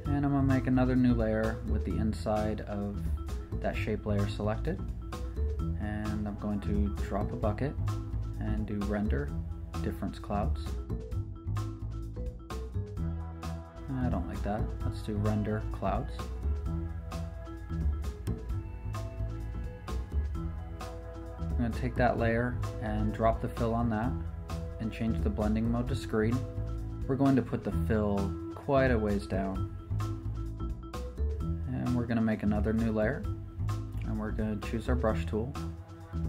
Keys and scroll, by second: 0.5 super+n, 1.8 Escape, 2.7 shift+super+n, 3.1 Return, 29.7 super+d, 31.9 shift+super+n, 33.8 Return.